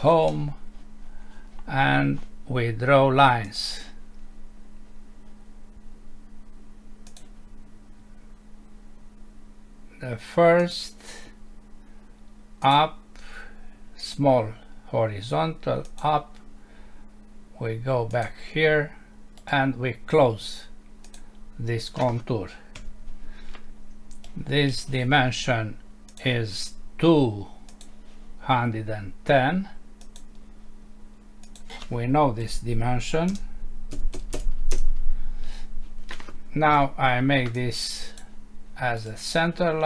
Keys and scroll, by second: 22.8 Escape, 33.3 BackSpace, 34.7 Return, 36.7 Escape.